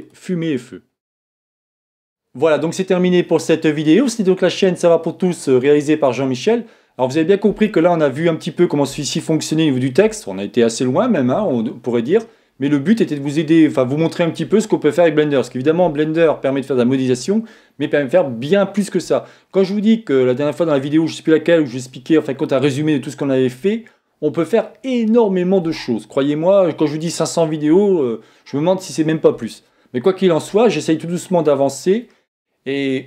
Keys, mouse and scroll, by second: 0.0 click.